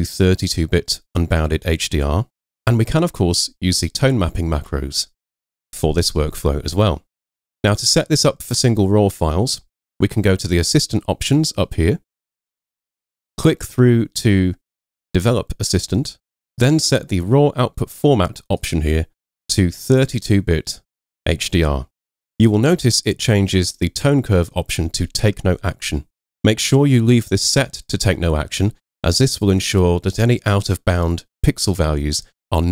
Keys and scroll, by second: 4.6 super+w.